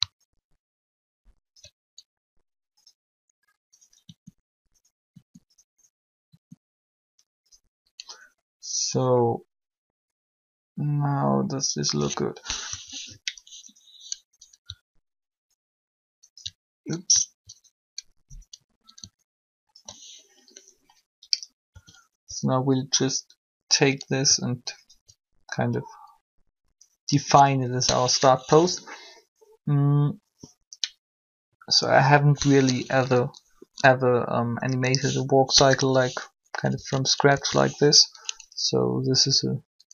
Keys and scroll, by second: 4.0 r, 12.5 3, 21.7 a, 36.7 1, 37.2 3.